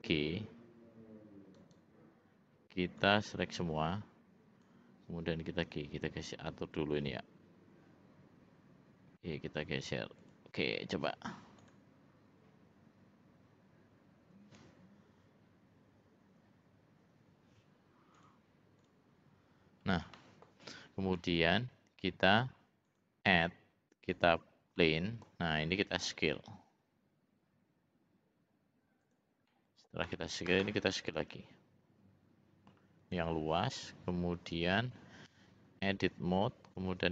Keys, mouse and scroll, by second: 0.0 g, 3.0-4.8 drag, 5.6 g, 11.6 click, 18.1 click, 18.8 click, 20.1 middle click, 20.6 click, 21.1 middle click, 22.8-24.3 drag, 24.7 middle click, 26.0 s, 29.5 middle click, 31.2 s, 35.5 Tab, 37.0 ctrl+r.